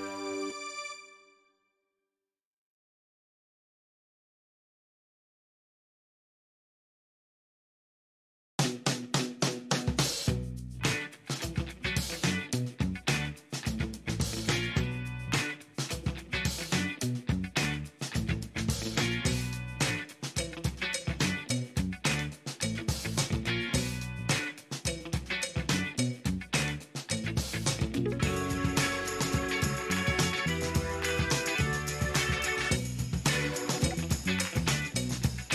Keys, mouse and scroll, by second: 1.0-2.1 typing, 3.2 Return, 5.2 shift+middle click, 7.4 scroll down 2, 8.0 click, 11.5 click, 13.0 click, 17.5 scroll up 2, 21.8 click, 23.7 scroll down 2, 24.2 shift+right click, 25.8 ctrl+shift+right click, 26.8 ctrl+shift+right click, 27.8 shift+middle click, 28.3 shift+right click, 32.9 right click, 34.2 click.